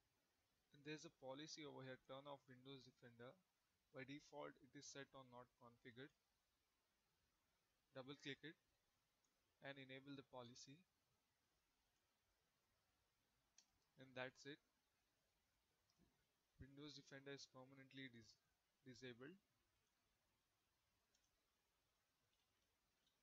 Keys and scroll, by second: 21.9-22.9 typing.